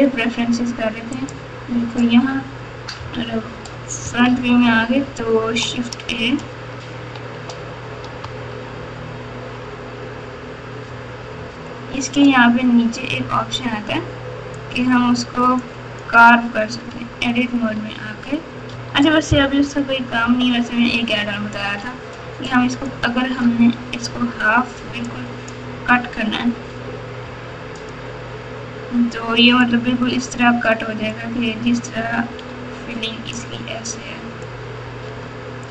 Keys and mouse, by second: 2.9 KP_3, 4.0 KP_1, 8.5 shift+a, 19.5 KP_4, 20.2 KP_8, 22.6-23.2 drag, 27.2 x.